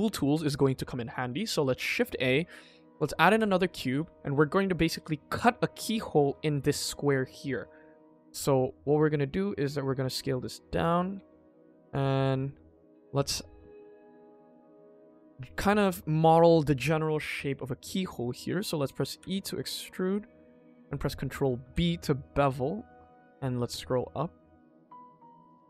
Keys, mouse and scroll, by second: 0.0 middle click, 1.1 ctrl+s, 1.8 shift+a, 3.1 g, 3.9 s, 5.6 middle click, 6.1 click, 7.0 middle drag, 7.4 shift+middle click, 8.0 click, 8.4 middle drag, 9.5 middle drag, 10.0 s, 11.1 KP_1, 11.4 scroll up 2, 11.6 shift+middle click, 12.2 shift+middle click, 13.1 click, 14.8 Tab, 15.4 click, 15.8 click, 17.9 middle click, 19.1 e.